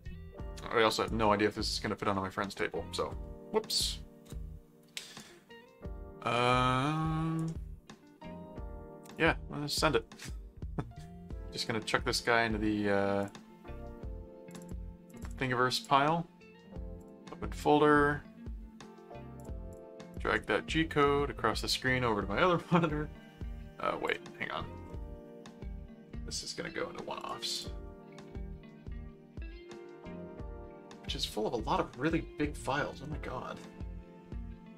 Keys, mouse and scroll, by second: 5.2-7.3 right drag, 9.1 click, 13.2 click, 14.5-16.3 drag, 17.0 click, 19.4-24.1 drag, 27.2 click.